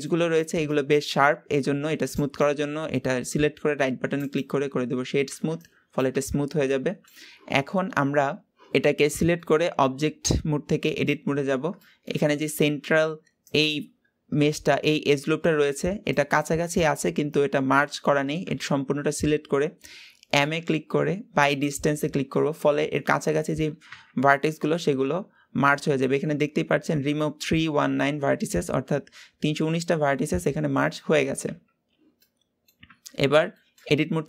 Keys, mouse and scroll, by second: 4.8 scroll down 1, 6.3 scroll down 1, 6.6-8.5 middle drag, 9.3 scroll up 1, 9.3-11.3 middle drag, 11.3-11.7 scroll up 3, 11.7-16.0 shift+middle drag, 22.5-31.4 middle drag, 32.2 middle click, 32.8 Tab, 33.1-33.5 scroll down 2, 33.5-34.2 shift+middle drag.